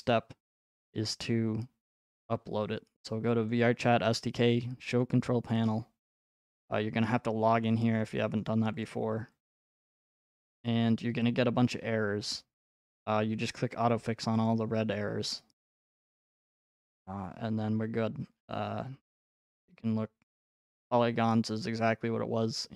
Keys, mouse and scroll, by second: 3.5 click, 5.0 click, 8.8 click, 9.5 click, 12.6 click, 13.6 click, 14.5 click, 16.0 click.